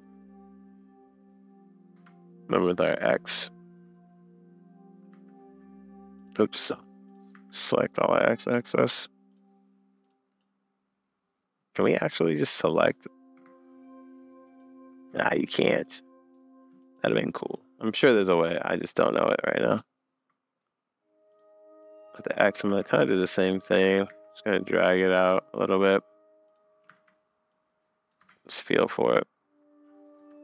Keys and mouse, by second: 2.2 space, 3.0 click, 5.1 a, 7.1 click, 7.3 a, 8.7 click, 9.3 click, 10.0 right click, 10.4 right click, 13.3 Escape, 15.9 click, 16.2 drag, 17.6-19.8 drag, 21.3 click, 21.8-22.1 drag, 22.7 s, 23.9 g, 26.5 click, 27.0 super+s, 27.5 click, 28.2 space, 30.2 space.